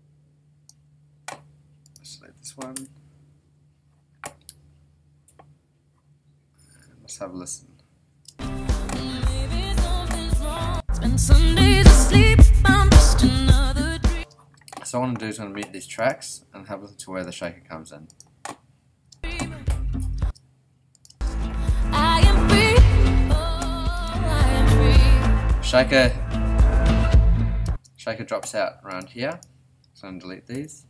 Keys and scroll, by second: 2.7 BackSpace, 8.2 space, 14.1 space, 19.1 space, 27.6 space, 30.5 BackSpace.